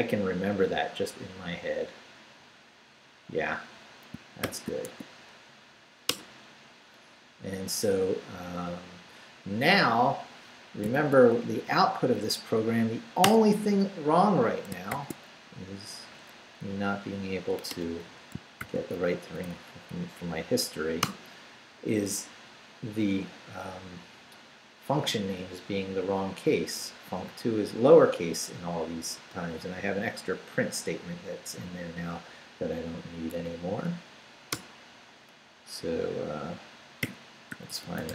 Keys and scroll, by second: 4.4 shift+;, 4.9 shift+q, 5.7 q, 6.1 Return, 10.9 shift+;, 11.4 shift+Up, 13.2 Return, 14.9 shift+;, 16.1 shift+Up, 16.6 Down, 17.5 q, 17.7 Return, 18.3 shift+Return, 18.6 shift+;, 19.0 shift+Up, 21.0 Return, 34.5 Return, 36.8-38.1 typing.